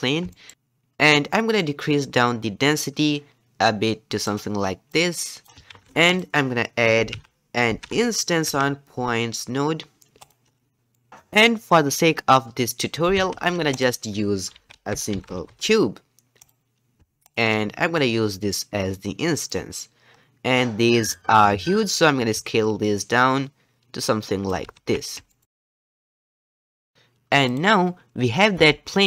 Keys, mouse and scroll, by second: 0.3 shift+middle click, 0.5 shift+click, 1.5-10.8 drag, 19.5-20.1 drag, 20.1-21.5 scroll down 1, 21.5-22.4 scroll down 1, 22.4-24.7 drag, 24.7 alt+a, 25.0-26.9 middle drag, 26.9 click, 27.5 click, 28.5 g.